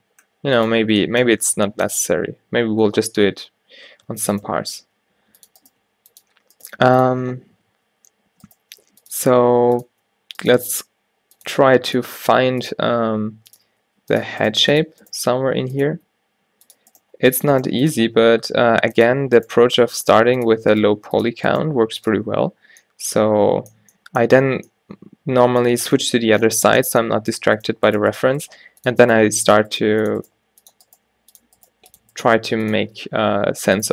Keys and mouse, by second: 0.0 a, 4.2 Tab, 4.4-5.8 drag, 4.9-16.0 typing, 14.5-17.0 drag, 17.1 g, 17.4-18.4 drag, 17.7 g, 18.1 e, 19.6 g, 21.0 g, 21.7 g, 22.3 Tab, 27.4 Tab, 28.1-32.3 typing, 32.9 Tab, 33.6 Tab.